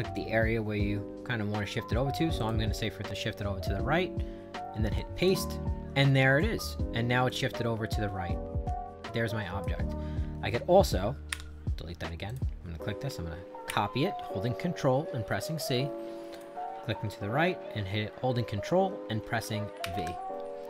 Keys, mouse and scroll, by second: 2.4 click, 5.0 click, 7.3-9.6 drag, 12.3 click, 13.7 ctrl+c, 16.3 click, 19.8 ctrl+v.